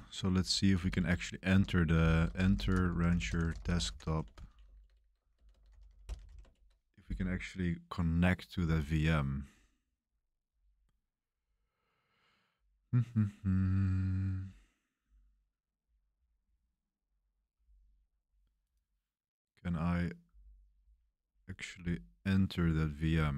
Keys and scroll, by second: 0.3-6.7 typing.